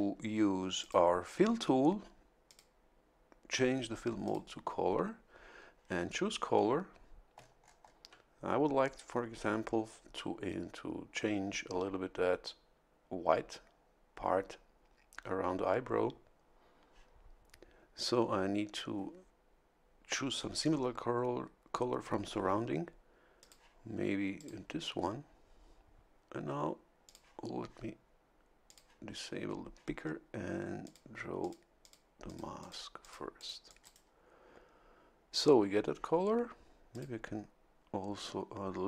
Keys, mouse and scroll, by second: 0.8 click, 2.4 click, 4.2 click, 7.3-8.0 ctrl+scroll up 3, 7.6 ctrl+middle click, 23.4 click, 24.3 click, 27.0 click, 28.6 click, 30.8 click, 31.4 click, 31.8 click, 32.2 click, 33.0 click, 33.4 click, 33.8 right click, 36.9 click.